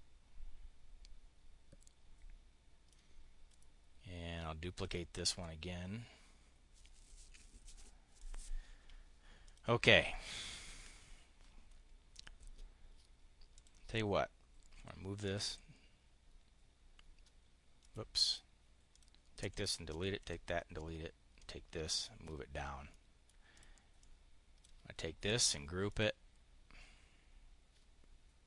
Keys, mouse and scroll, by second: 3.4 click, 4.8 click, 5.2-7.6 drag, 8.0 click, 9.2 click, 13.4 click, 14.6 Delete, 15.0 click, 17.6 click, 18.1 click, 18.8 click, 19.2 Delete, 19.6 click, 20.1 Delete, 21.2 click, 22.6 click, 23.5 click, 25.7 click.